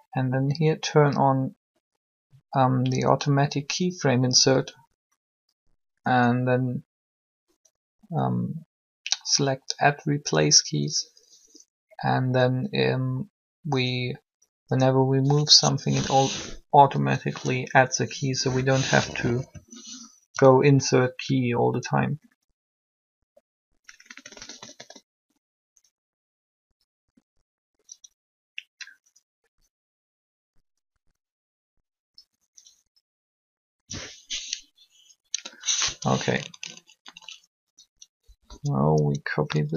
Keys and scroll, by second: 19.4 3, 38.2 Up.